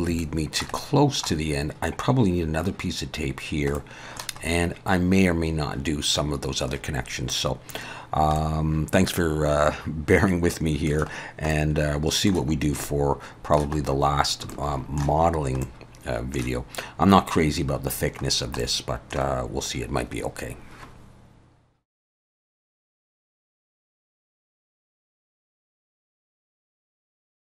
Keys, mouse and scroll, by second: 0.2 shift+middle click, 0.8 middle click, 3.8 middle click, 4.4-6.8 scroll up 2, 7.3 middle click, 7.8-8.4 scroll down 3, 8.4 middle click, 11.2 scroll down 1, 11.5 middle click, 12.6 scroll up 1, 12.8 middle click, 13.8 scroll up 2, 14.5 shift+middle click, 15.4 scroll up 2, 15.6 middle click, 18.3 scroll down 2, 18.6 middle click.